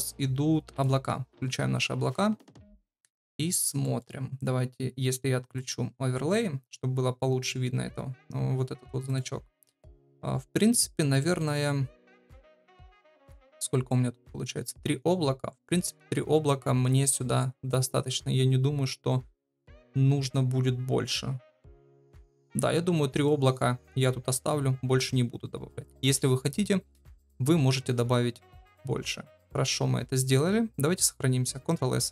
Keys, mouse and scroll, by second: 1.7 shift+middle click, 3.8 shift+middle click, 5.5-8.9 drag, 9.0 click, 20.1-32.0 drag.